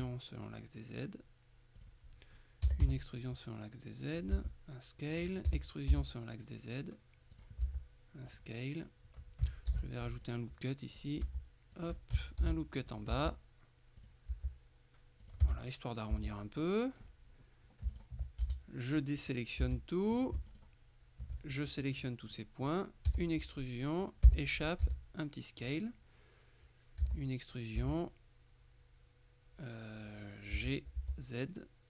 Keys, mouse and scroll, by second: 1.9 click, 2.5-3.4 typing, 4.3 click, 4.5 s, 5.2 click, 5.6 e, 6.0 z, 7.4 click, 7.7 s, 8.4 click, 9.8 ctrl+r, 10.3 ctrl+click, 11.0 click, 11.3 s, 11.8 click, 12.5 ctrl+r, 12.9 ctrl+click, 13.2 ctrl+s, 14.1 click, 14.4 s, 15.3 click, 15.5 Tab, 16.2 Tab, 16.7 middle click, 18.0 alt+right click, 18.5 alt+a, 18.5 alt+middle click, 19.3 click, 19.7 a, 20.6 alt+shift+right click, 22.4 click, 23.2 e, 24.3 Escape, 25.7 click, 27.1 e, 27.9 Escape, 30.7 g, 31.1 z.